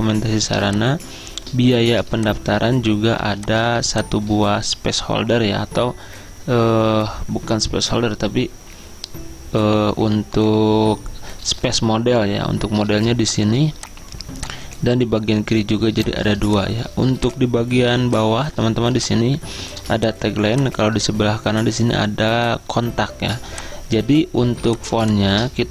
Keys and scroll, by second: 3.2 z, 15.8 z.